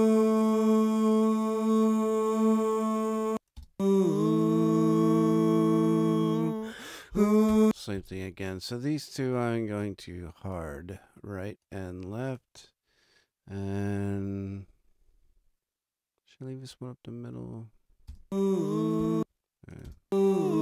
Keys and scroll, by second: 3.1 space, 7.4 space, 18.0 space.